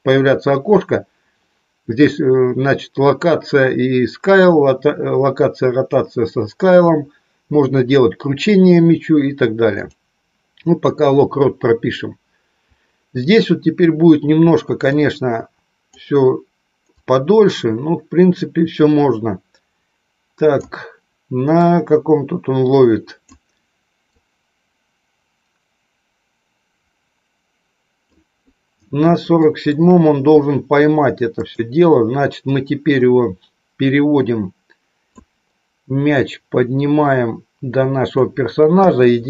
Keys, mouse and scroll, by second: 15.1 click, 17.3-20.8 drag, 21.8-23.4 drag, 24.2-28.2 drag, 29.2 shift+middle click, 32.3-35.1 drag, 36.1-38.1 drag, 38.6 KP_1.